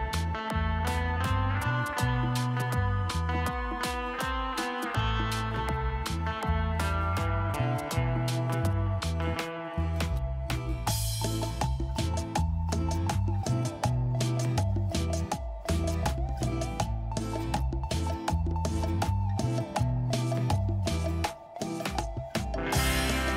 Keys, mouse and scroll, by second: 0.0-3.7 typing, 3.9 ctrl+space, 11.0-11.8 scroll up 2, 11.8 shift+click, 16.9 scroll down 1, 20.2 ctrl+z, 21.1 scroll up 1.